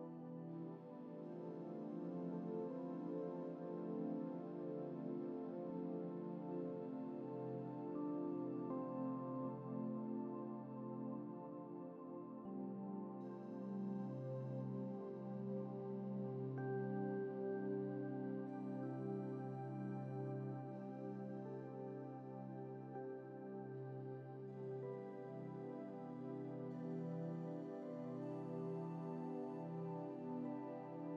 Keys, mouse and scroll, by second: 1.9-2.9 scroll down 2, 3.5-4.5 middle drag, 4.8-6.1 scroll up 5, 6.3-7.1 scroll up 1, 7.1 scroll up 1, 8.4-8.9 scroll down 2, 8.9-10.3 middle drag, 10.5 scroll down 1, 11.0-12.1 middle drag, 12.1 scroll down 1, 30.5 scroll down 1.